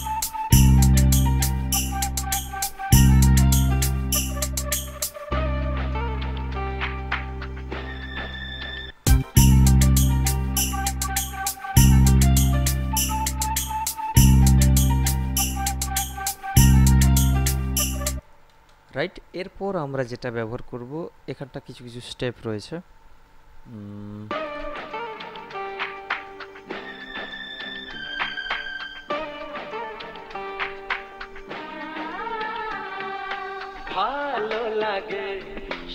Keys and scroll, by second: 9.0 space, 18.4 space, 24.5 space.